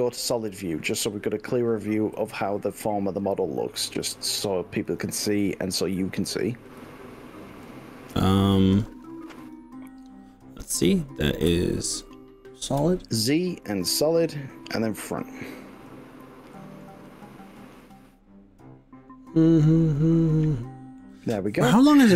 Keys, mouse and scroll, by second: 4.9 click, 6.8-7.5 s, 7.7 s, 9.5 click, 11.6 z, 13.1-16.8 middle drag, 14.3 z, 17.1 middle click, 17.1-17.7 scroll down 6, 17.4 middle click, 17.9-21.1 middle drag.